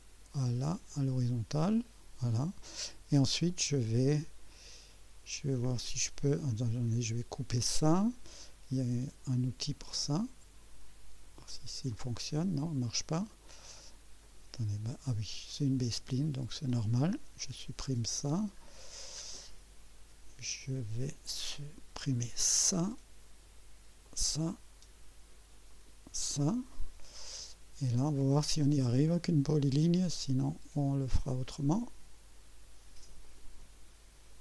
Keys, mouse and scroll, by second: 0.9 click, 1.8 right click, 9.3 click, 11.9 click, 13.3 right click, 14.2 right click, 16.5 click, 17.4 Delete, 18.6-18.9 scroll down 1, 19.4-21.0 right drag, 22.0 click, 22.5 Delete, 24.0 click, 24.4 Delete, 25.7 click, 26.1 Delete, 27.1-27.8 right drag, 29.0 click, 31.6 click, 33.2 click.